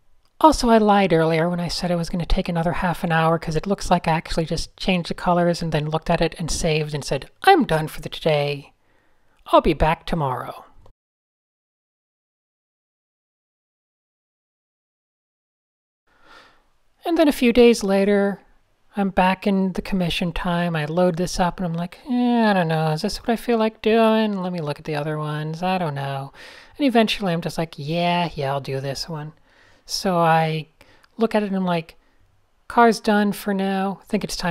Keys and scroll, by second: 8.3 super+s, 22.8 super+Tab, 33.1 f.